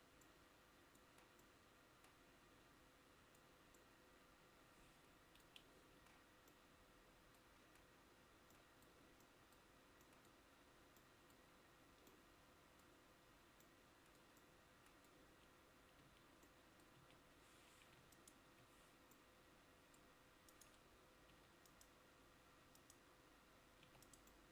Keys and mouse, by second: 16.1 Tab, 17.1 a, 24.0 e.